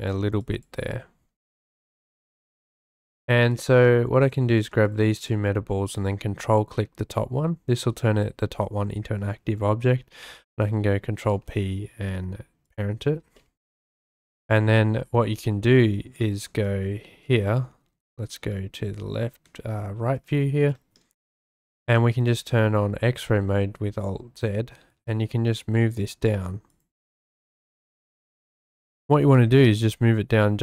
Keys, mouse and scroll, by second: 0.4 shift+middle click, 1.1-1.8 shift+middle drag, 3.5 right click, 4.2 click, 5.2 ctrl+click, 10.2 ctrl+p, 13.4-14.1 drag, 16.6 `, 18.0 `, 19.4 `, 20.8 shift+drag, 20.9-21.6 shift+scroll, 21.7 shift+drag, 22.3 alt+z, 24.8 g, 25.0 z, 26.4 shift+middle click, 26.7 shift+click, 26.9-27.3 shift+middle drag, 27.5 shift+middle click, 27.6-27.9 shift+drag, 29.2 g, 29.2 z.